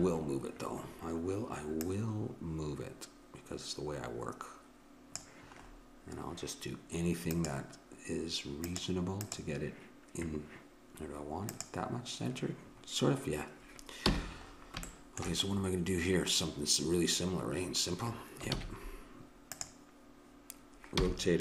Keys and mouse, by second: 1.8-3.6 drag, 5.6-7.3 middle drag, 7.3-11.2 right drag, 11.5-13.5 drag, 14.0 n, 18.5 shift+a, 21.0 r.